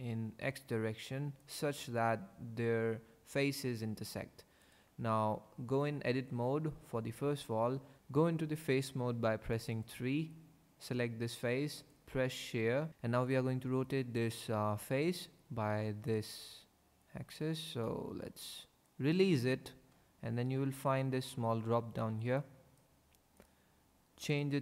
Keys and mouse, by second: 1.4 click, 4.6 click, 5.3 Tab, 9.0 3, 11.7 click, 20.8 click, 22.4 click, 23.4 click, 24.3-24.6 drag.